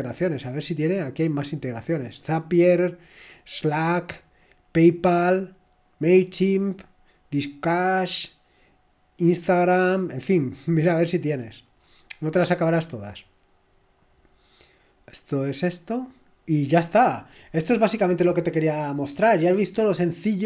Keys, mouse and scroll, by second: 0.0 click, 3.6-4.2 scroll down 1, 5.8 scroll down 1, 7.1 scroll down 1, 8.1-8.7 scroll down 1, 10.0-11.3 scroll down 1, 11.3-12.8 scroll down 1, 12.8-13.2 scroll up 1, 14.3 click, 16.8 click.